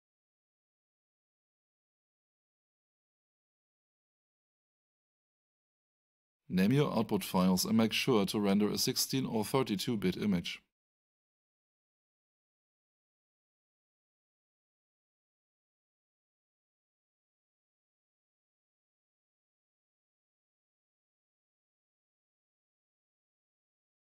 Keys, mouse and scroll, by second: 6.1 click, 9.3 click, 11.6-13.4 typing, 19.2 click.